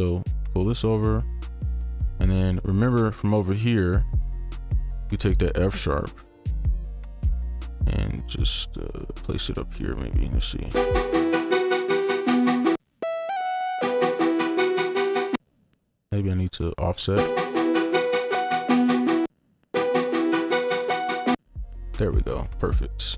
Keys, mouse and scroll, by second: 0.1 shift+click, 1.9-2.4 scroll up 1, 4.8 ctrl+click, 5.1 ctrl+right click, 6.8 ctrl+right click, 6.8-7.3 scroll up 1, 7.3 ctrl+click, 7.9 shift+click, 10.7 space, 12.7 space, 13.3 double click, 13.8 space, 15.3 space, 16.0 ctrl+click, 16.7-17.1 shift+scroll down 3, 17.1 space, 19.2 space, 19.5 shift+scroll up 2, 19.7 space, 21.3 space, 22.1 right click, 22.6 ctrl+click.